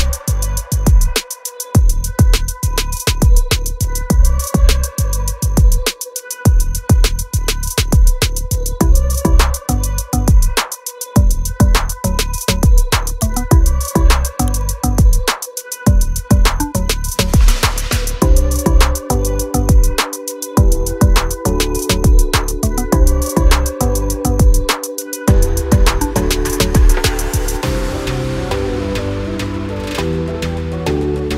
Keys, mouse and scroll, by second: 0.7 scroll down 1, 2.6 click, 3.7 click, 6.5 click, 6.5 scroll up 1, 7.7 scroll down 1, 8.1 scroll up 1, 8.7 click, 9.8 scroll down 1, 10.1 click, 15.0 click, 19.4 click, 22.3 double click, 22.9 scroll up 1, 23.6 click, 25.8 scroll down 1, 26.2 click, 28.9 double click.